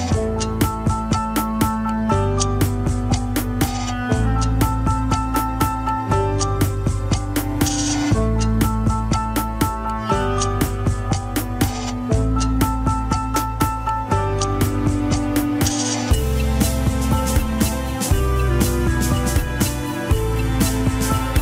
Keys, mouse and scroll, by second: 1.5 ctrl+KP_Add, 2.2 scroll down 1, 2.8-3.2 scroll down 9, 3.2 g, 4.0-4.5 scroll up 10, 4.7 Tab, 4.8 middle click, 5.3-5.7 scroll up 1, 5.7 Tab, 7.3 click, 8.0 Tab, 9.5 ctrl+click, 11.5 ctrl+click, 12.9 ctrl+click, 14.5 ctrl+click, 15.7 ctrl+click, 17.0 Tab, 18.3 click, 19.0 Tab, 19.3-21.4 shift+middle drag.